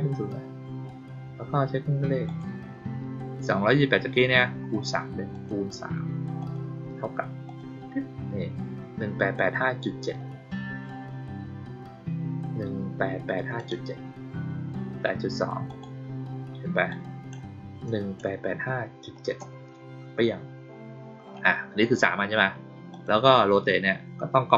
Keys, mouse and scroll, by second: 2.2 click, 5.2 click, 6.3 click, 7.4 click, 13.5 click, 15.6 click, 16.8 click, 22.8 click.